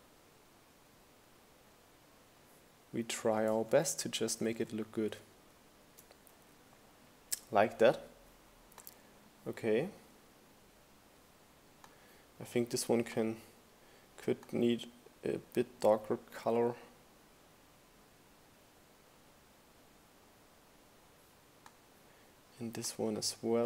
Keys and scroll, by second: 0.1 shift+Up, 0.3 shift+Right, 0.8 shift+Down, 2.1 Down.